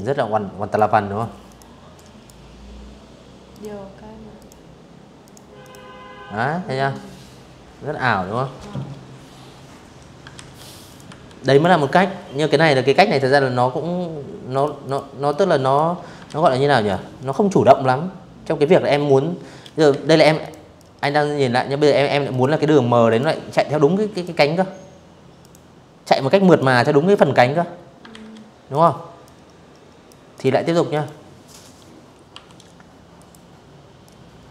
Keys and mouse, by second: 1.2 click, 2.0 click, 2.9 click, 3.2 click, 8.0 ctrl+z, 8.5 click, 8.7 v, 9.2 click, 12.2 click, 12.5 click, 13.0 click, 13.9 ctrl+z, 14.5 click, 17.6 ctrl+z, 18.1 click, 18.4 click, 19.9 click, 20.7 click, 21.8 click, 23.0 click, 24.2 click, 25.7 ctrl+z, 26.4 click, 26.9 click, 28.0 click, 28.6 click, 30.0 Delete, 30.8 click, 31.7 click, 32.6 v, 32.7 click, 33.0 shift+click, 34.2 click.